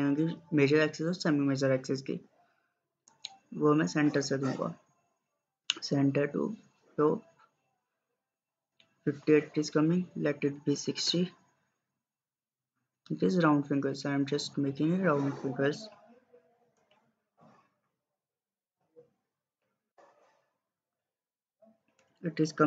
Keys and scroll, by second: 10.5-11.3 typing.